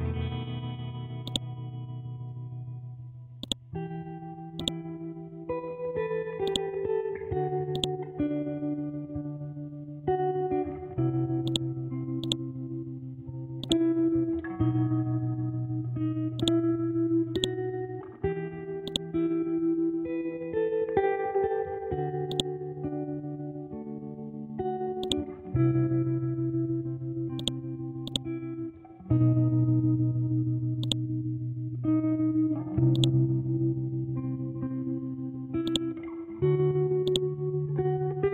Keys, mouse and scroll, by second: 1.2-11.4 drag, 12.2 right click, 13.6 click, 16.4 click, 19.8-20.2 scroll down 1, 22.3 click, 22.6 scroll up 1, 23.4 scroll down 1, 25.0 click, 25.4-27.1 scroll up 1, 27.4-38.3 drag.